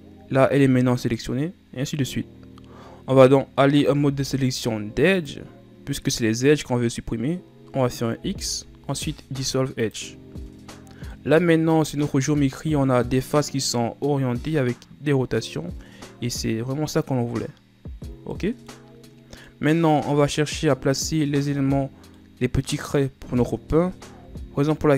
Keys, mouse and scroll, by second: 3.5 middle click, 4.2 ctrl+Tab, 8.4 x, 10.7-11.3 scroll down 2, 11.3-14.3 middle drag, 18.5-24.4 middle drag, 24.4 KP_7.